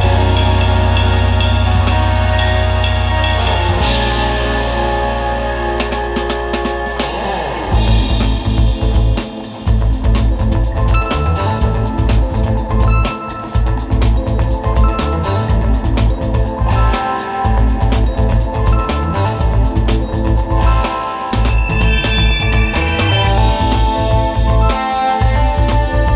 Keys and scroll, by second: 1.1 super+g, 2.3 super+", 2.8 super+z, 3.9 super+x, 6.6 super+", 8.7 super+", 10.1 super+", 10.3 space, 13.1 space, 13.3 space, 13.6 space, 14.8 super+z, 15.8 space, 17.0 space, 17.6 space, 17.9 super+", 18.3 space, 19.3 alt+super+space, 21.0 space, 25.8 super+[.